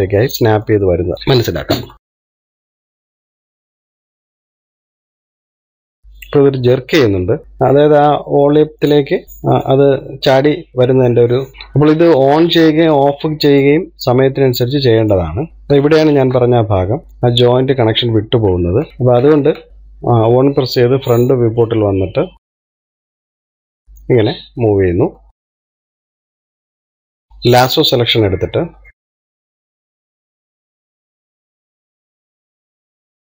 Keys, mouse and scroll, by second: 1.7 scroll up 1, 1.9 middle click, 2.1 click, 2.6 middle click, 3.0 KP_3, 3.2 scroll up 2, 3.5 click, 3.7 click, 5.3 middle click, 5.5-5.9 scroll down 1, 5.9 click, 9.6-10.9 middle drag, 10.9-11.3 scroll up 1, 11.3-12.4 middle drag, 12.4 click, 16.1 click, 16.3-17.2 scroll up 3, 16.8 shift+middle click, 18.9 ctrl+z, 19.0 ctrl+z, 19.7-20.8 scroll down 2, 20.8 KP_1, 22.7 click, 23.8 click, 25.3-27.3 drag, 29.4 scroll up 2, 29.6 shift+middle click, 30.1 click, 32.0 shift+middle click, 32.5 click.